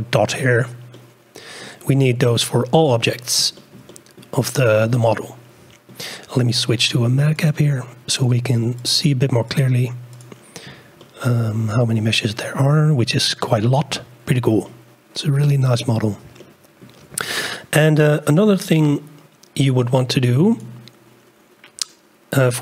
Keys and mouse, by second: 0.9-1.5 middle drag, 1.5 click, 2.1 a, 3.6 shift+click, 3.9-4.2 drag, 4.9-5.5 drag, 5.5-5.9 middle drag, 7.5-9.9 middle drag, 11.0-11.9 shift+drag, 14.6-15.7 drag, 16.4 shift+click, 20.5 click.